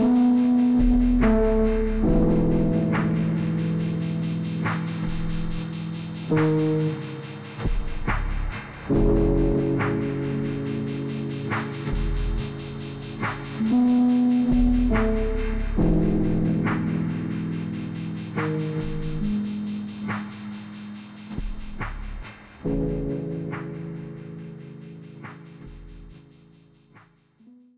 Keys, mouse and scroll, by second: 0.3 ctrl+Num_Lock, 0.8-2.3 typing, 3.1 click, 5.4 click, 12.5 scroll up 1, 12.7 click.